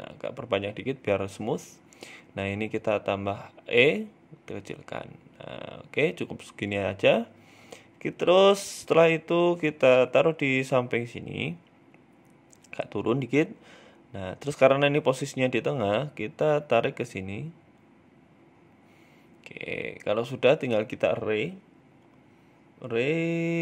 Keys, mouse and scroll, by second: 1.3 click, 2.2 e, 2.9 s, 4.0 Tab, 4.1-4.9 scroll down 6, 4.3 shift+middle click, 4.9 s, 6.1 g, 7.5 shift+middle click, 7.7-8.1 scroll up 3, 7.8 Tab, 8.3 a, 8.7 g, 10.6 Tab, 10.9 f, 11.2 g, 12.3 Tab, 12.6 g, 13.8 middle click, 14.3 scroll down 3, 14.5 middle click, 15.4 Tab, 16.0 g, 18.1 middle click, 18.5 shift+middle click, 18.7 scroll up 2, 18.9 shift+middle click, 19.3 middle click, 19.9 KP_1, 20.9 click, 22.7-23.6 click.